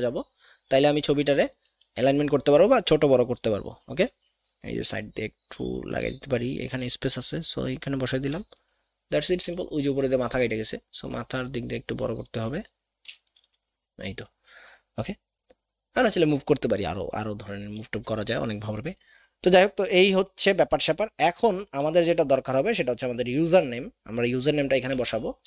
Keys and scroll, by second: 24.9 alt+Tab.